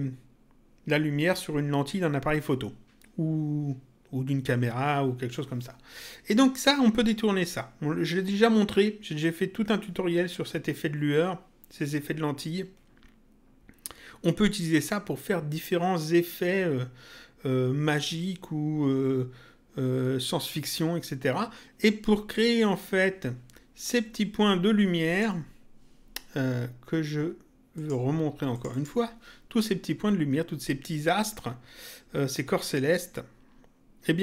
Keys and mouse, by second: 25.0 click, 27.7 click.